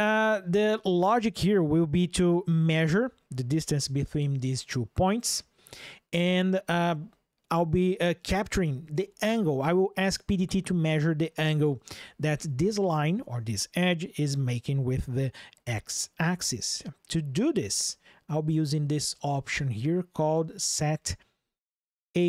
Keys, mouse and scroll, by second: 0.0 ctrl+shift+\, 18.8 click, 22.0 ctrl+shift+\.